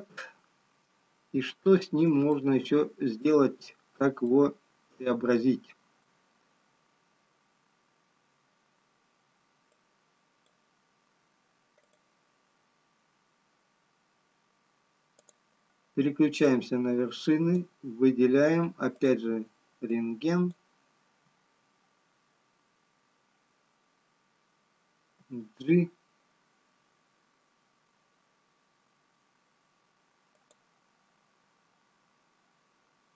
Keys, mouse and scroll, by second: 0.6 Tab, 4.8 shift+middle click, 4.8-6.6 scroll up 4, 8.2 scroll down 1, 9.8 click, 12.2 click, 17.0 click, 26.7 g.